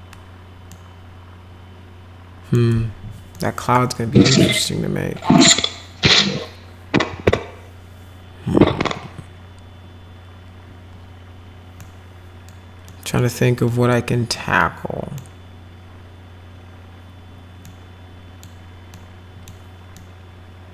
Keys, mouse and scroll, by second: 0.7-2.5 middle drag, 3.3 middle click, 4.7 middle click, 11.8 middle click, 12.9 middle click, 14.3 middle click, 17.6 middle click, 18.9 middle click, 19.9-20.7 middle drag.